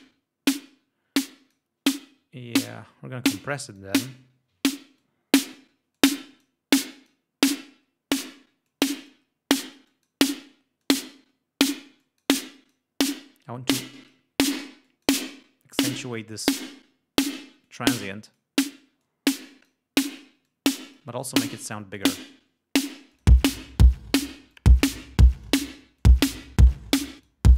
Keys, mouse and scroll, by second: 0.1-1.8 drag, 2.1 right click, 3.8 click, 5.1-5.8 drag, 6.0-6.7 drag, 6.9-7.4 drag, 7.7-8.6 drag, 8.8-9.4 drag, 10.0 click, 10.9-11.4 drag, 12.1 click, 12.6 click, 13.9-14.4 drag, 14.9 click, 15.8 click, 17.7-18.7 drag, 19.1-19.9 drag, 20.5 click, 22.1 click, 23.2 click, 24.0 ctrl+scroll down 2, 24.6 ctrl+click, 25.5 click, 26.4 click, 27.3 click.